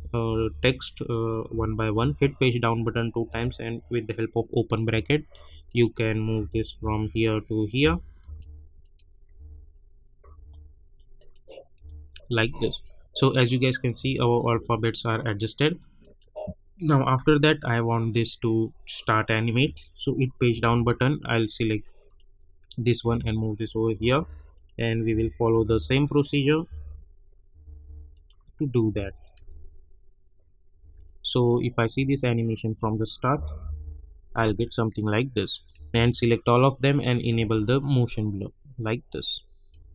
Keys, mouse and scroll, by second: 0.2 Page_Down, 0.8 click, 1.5 [, 1.9 Page_Down, 2.4 click, 3.2 [, 4.9 Page_Down, 5.6 click, 6.3 [, 6.8 Page_Down, 7.1 click, 7.8 [, 8.2 Page_Down, 8.8 click, 9.3 [, 9.7 scroll up 1, 10.2 Page_Down, 11.1 click, 11.8 [, 12.0 scroll up 1, 13.9 space, 16.0 click, 20.4 Page_Down, 22.0 click, 23.0 [, 23.9 Page_Down, 24.5 click, 25.1 [, 25.5 Page_Down, 25.9 click, 26.6 [, 27.6 Page_Down, 28.1 click, 28.9 [, 29.3 space, 31.0 click, 31.9 space, 33.3 -, 33.5 -, 33.8 -, 34.4 space, 35.0 click, 35.9 ctrl+a, 36.8 click, 37.3 space, 39.7 space.